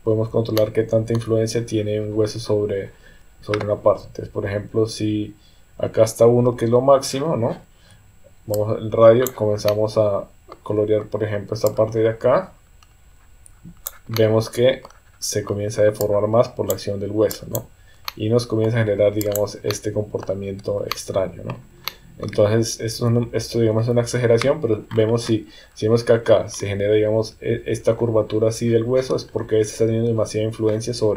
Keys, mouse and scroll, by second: 0.6 shift+middle click, 8.6 click, 9.7 middle click, 11.6-13.9 drag, 14.2 middle click, 16.0 click, 17.3 click, 18.1 middle click, 19.2 click, 19.7 middle click, 20.9 middle click, 21.9 middle click, 22.9 KP_1, 23.7 KP_3.